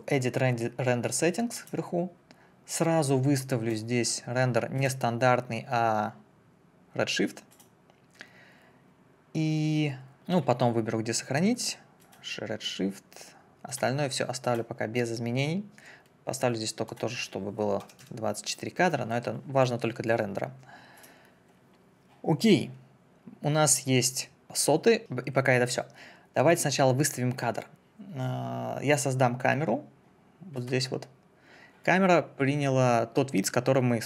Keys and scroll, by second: 17.8 2, 18.0 4.